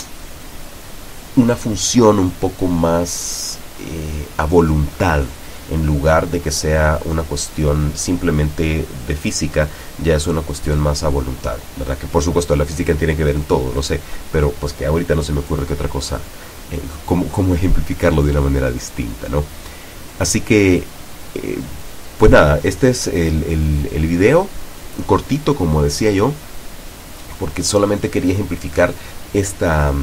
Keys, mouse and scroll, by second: 3.0 right click, 4.1-4.6 scroll down 2, 4.8 scroll up 2, 5.2 scroll down 1, 5.9-6.6 scroll up 4, 7.2-7.7 scroll up 2, 7.8-8.2 scroll up 2, 8.5 scroll down 1, 9.8-10.2 scroll down 2, 10.3 scroll down 1, 10.8-11.2 scroll up 2, 11.3 scroll up 2, 27.3-27.9 drag, 29.1 right click.